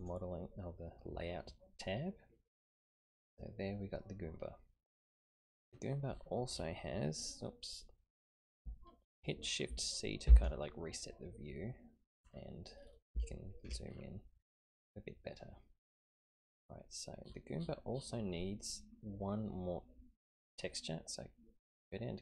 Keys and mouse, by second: 0.0 click, 2.2-5.2 middle drag, 10.3 shift+c, 13.3 shift+middle click.